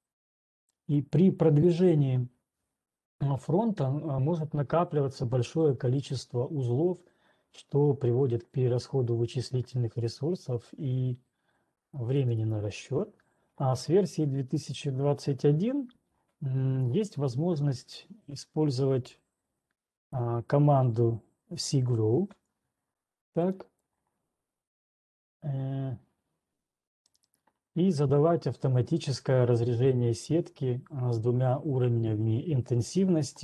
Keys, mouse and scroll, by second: 13.0 right click, 19.2 scroll down 1, 23.0 ctrl+1, 23.0-23.8 scroll down 1, 23.8 click, 25.1 click, 27.2 right click, 28.3 right click, 29.4 middle click, 30.4 scroll.